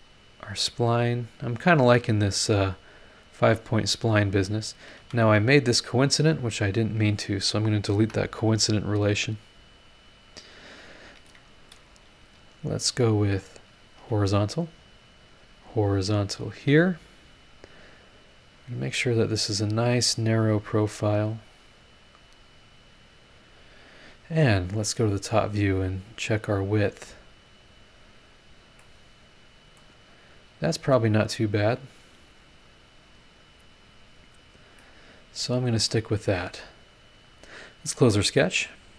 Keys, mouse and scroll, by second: 0.8 click, 1.6 click, 1.9 scroll down 1, 2.3 scroll up 1, 2.7 click, 3.9 click, 5.0 Escape, 6.0 Escape, 6.8 click, 8.0 Delete, 10.0 click, 11.9 click, 13.5 click, 14.0 h, 15.2 click, 16.5 click, 16.7 h, 18.3-19.3 drag, 20.7-21.7 drag, 22.3-24.2 drag, 25.3 click, 25.8-26.3 scroll down 2, 26.3-27.6 scroll up 8, 28.0 scroll down 2, 28.4 scroll up 2, 28.8 click, 29.0 right click, 29.8 scroll up 1, 30.6 scroll down 1, 32.6 click, 34.0-34.6 scroll down 2, 34.8-36.1 middle drag, 34.9-36.1 right drag, 38.2 click.